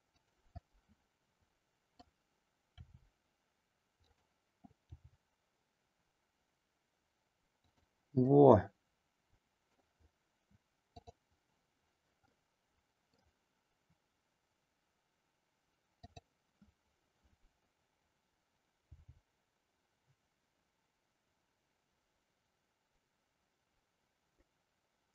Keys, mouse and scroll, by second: 0.5-2.0 middle drag, 2.7 r, 4.8 g, 7.7 click, 8.2-9.8 middle drag, 10.9 click, 12.3 scroll up 1, 12.4 middle click, 18.8 g.